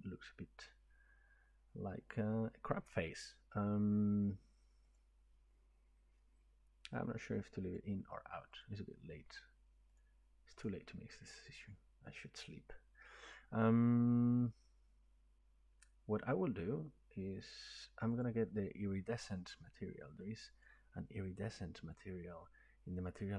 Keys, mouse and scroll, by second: 5.0 click, 7.8 click, 8.6 click, 10.0 click, 10.6 click, 18.2 click, 20.6 click.